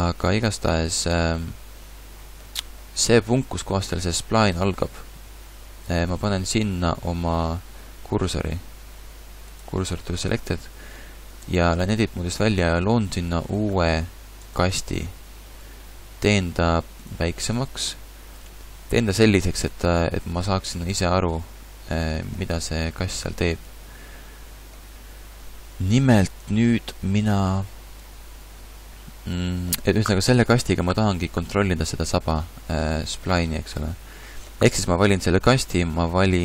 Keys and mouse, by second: 0.4 middle click, 6.1 shift+s, 11.4 Tab, 12.7 shift+a, 15.6 s, 17.3 s.